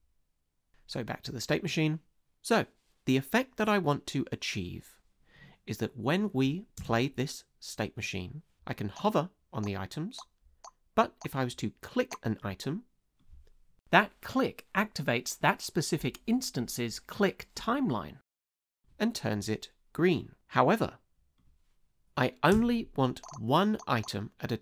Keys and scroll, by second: 6.8 space, 15.6 space, 22.5 space.